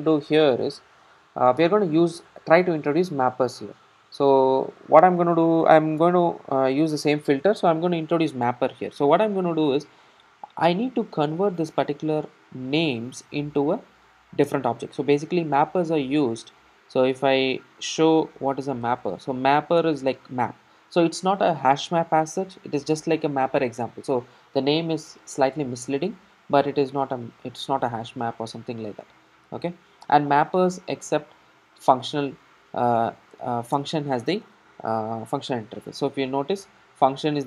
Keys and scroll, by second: 19.8 Return, 29.8 Return.